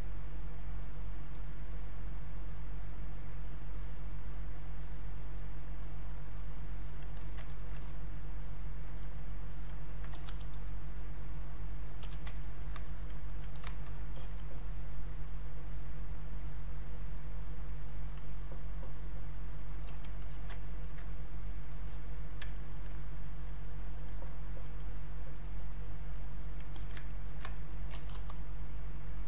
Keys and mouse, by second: 1.7 ctrl+click, 3.9 ctrl+click, 5.1 ctrl+click, 5.8 ctrl+click, 7.5 ctrl+right click, 7.8-9.5 ctrl+drag, 10.3 e, 10.9 click, 12.0 q, 12.4 ctrl+right click, 13.3 alt+click, 14.2 alt+click, 19.7 click, 20.2 alt+click, 20.6 ctrl+right click, 21.9 alt+click, 22.5 ctrl+right click, 24.3 alt+click, 26.2 click, 26.8 alt+click, 27.1 ctrl+right click, 27.1 ctrl+right click, 27.7 alt+click, 28.1 r, 29.0-29.2 drag.